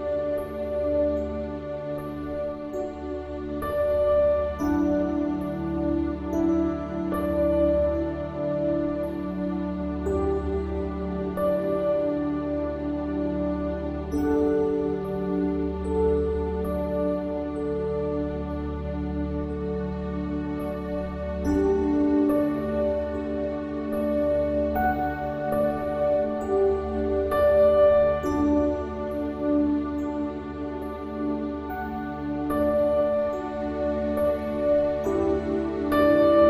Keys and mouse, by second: 1.8 click.